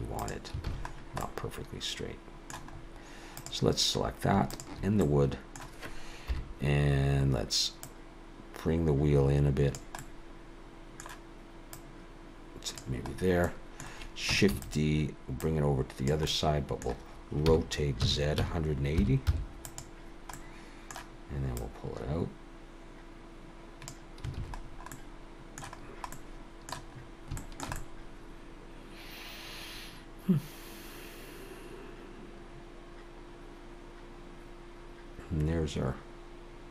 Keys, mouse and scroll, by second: 0.2 r, 0.7 alt+a, 0.9-1.6 scroll down 2, 1.2 middle click, 2.8-3.3 scroll up 2, 3.3 click, 3.3-3.6 scroll up 1, 4.5 shift+click, 5.0 middle click, 6.3 KP_7, 7.9 click, 10.0 middle click, 11.8 click, 13.1-14.3 scroll down 4, 13.5 middle click, 14.5 shift+d, 15.4 click, 16.3 middle click, 17.5 r, 20.3 middle click, 21.6 click, 24.4 alt+a, 24.6-25.8 scroll down 3, 24.9 middle click, 25.8-26.2 scroll down 2, 26.2 middle click, 27.0-27.3 scroll up 3, 27.4 shift+middle click, 27.8 middle click.